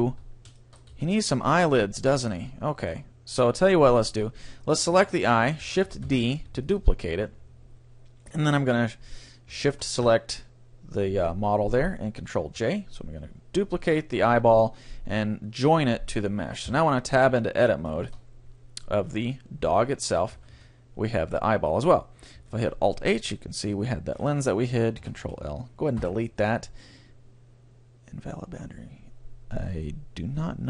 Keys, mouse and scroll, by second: 0.1 Tab, 0.9 middle click, 0.9 a, 1.1-3.9 middle drag, 2.8-4.7 right drag, 6.1 shift+d, 8.1 click, 9.7-11.5 right drag, 12.5 ctrl+j, 16.7 Tab, 17.3 middle click, 17.5-18.9 middle drag, 19.1 middle click, 20.3 a, 20.5 a, 21.7 middle click, 22.5 alt+h, 23.6-25.4 right drag, 25.0 ctrl+l, 26.0 Delete.